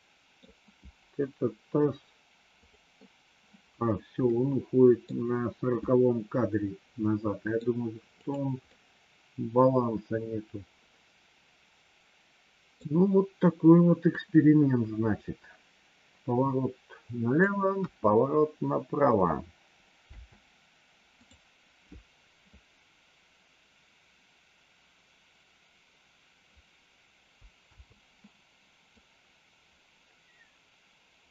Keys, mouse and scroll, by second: 2.6 click, 4.3 middle click, 5.8-7.6 middle drag, 8.1 click, 8.6-12.8 middle drag, 14.1-17.3 drag, 17.7 KP_1, 20.0 space, 21.1 click, 27.6 space, 29.0-31.3 drag.